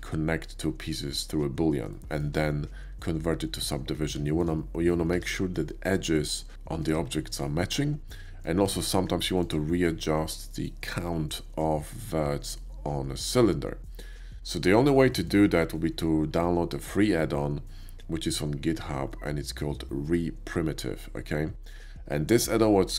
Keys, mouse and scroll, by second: 1.9-2.2 middle drag, 4.3 shift+middle click, 5.1 Tab, 6.8 ctrl+z, 8.0 middle click, 8.6 Tab, 9.4 click, 13.8 middle click, 15.0 shift+middle drag.